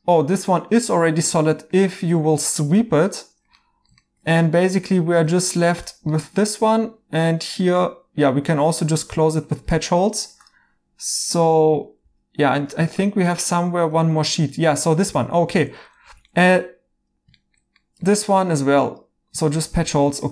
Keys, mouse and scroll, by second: 1.3 right click, 2.7 h, 3.1 right click, 8.2 right click, 9.8 right click, 12.0 alt+h, 13.0 right click, 16.0 h, 19.8 alt+h, 20.1 right click.